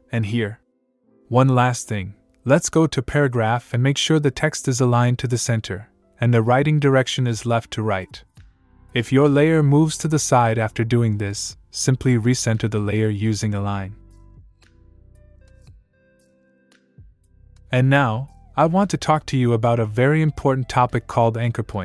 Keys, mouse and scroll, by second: 0.2 click, 3.0 click, 5.7 click, 8.0 click, 10.9 click, 14.9 click, 15.8 click, 19.2 click.